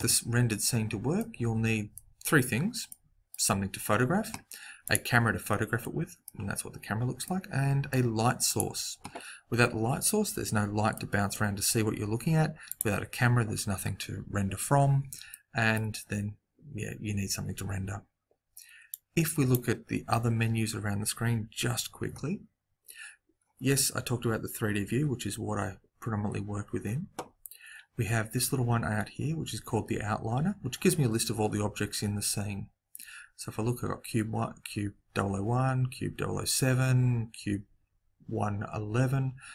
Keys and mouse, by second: 0.0 Escape, 4.8-6.6 right drag, 8.4-10.3 right drag, 10.3 middle click, 12.6-14.5 right drag, 15.2-17.2 middle drag, 18.9 click, 32.7-39.5 middle drag.